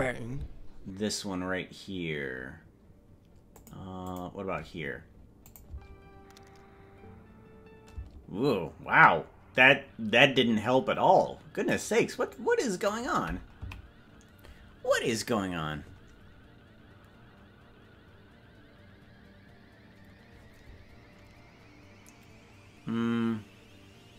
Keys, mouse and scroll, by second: 3.6 click, 4.1 click, 5.5 click, 5.8 space, 8.0 space, 11.7 click, 12.4 click, 13.8 Left.